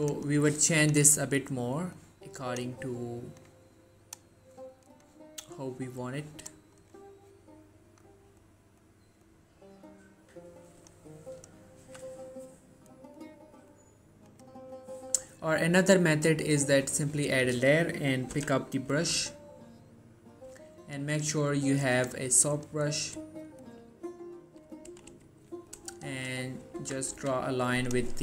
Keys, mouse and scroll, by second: 16.6 click, 18.5-20.5 typing, 21.3 click, 23.3-25.2 typing, 25.8 click, 26.9 ctrl+z, 27.3 x, 27.8 click.